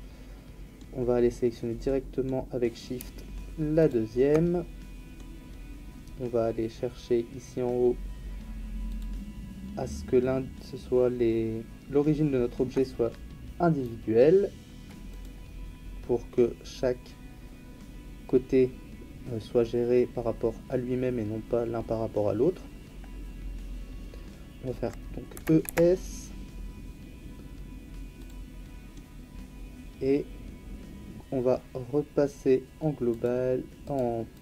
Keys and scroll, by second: 25.3 e, 25.6 s.